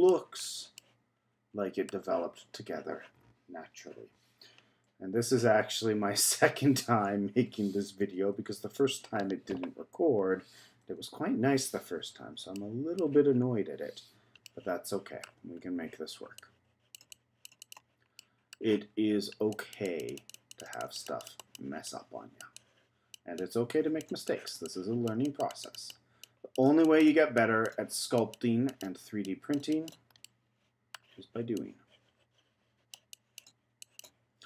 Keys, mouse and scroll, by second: 0.4-0.8 scroll down 2, 0.8-1.9 middle drag, 3.0 z, 6.5 z, 6.9-7.9 scroll up 2, 8.8 z, 11.6 z, 12.5 middle click, 13.3 scroll up 2, 14.4 shift+middle click, 15.2 shift+scroll down 1, 15.6-16.3 scroll up 1, 16.3-18.0 drag, 18.0 scroll down 1, 18.1 scroll up 1, 18.2 middle click, 18.7-19.5 scroll down 1, 19.5-30.2 drag, 30.2-31.5 middle drag, 31.5-34.4 drag.